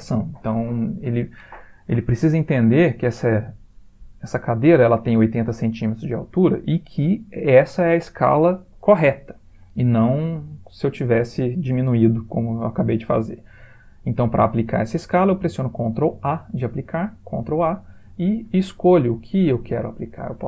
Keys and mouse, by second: 17.4 ctrl+a.